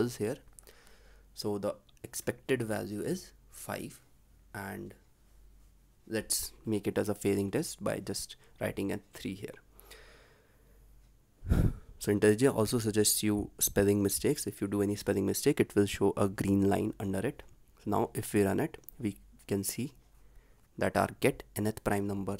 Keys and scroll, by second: 8.4 ctrl+s, 18.0 ctrl+s.